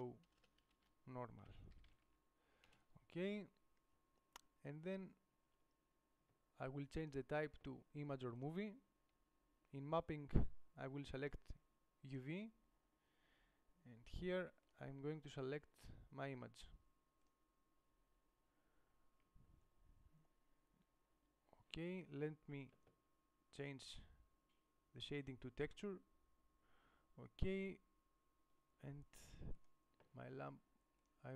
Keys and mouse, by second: 2.9 BackSpace, 27.9-28.9 middle drag, 29.8 right click.